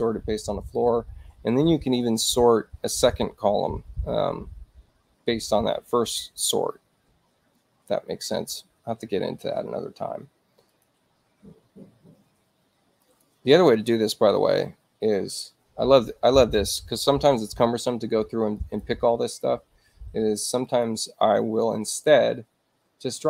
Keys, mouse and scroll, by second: 0.6 click, 10.7 click, 13.0 shift+click, 18.5 click, 20.6 click.